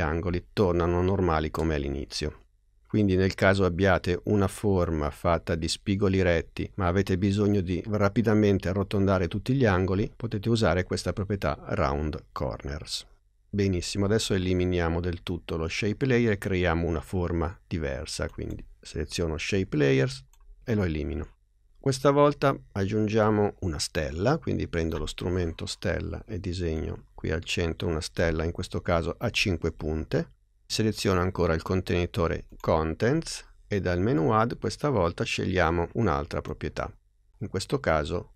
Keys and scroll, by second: 20.3 BackSpace.